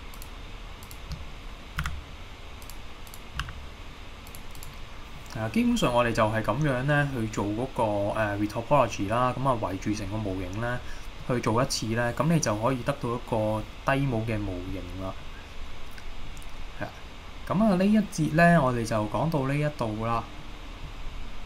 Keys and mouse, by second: 0.2 shift+click, 1.9 f, 3.4 g, 4.3 click, 5.2-5.6 middle drag, 6.8-9.1 middle drag, 11.2 middle click, 14.2-14.7 middle drag, 20.4 middle click.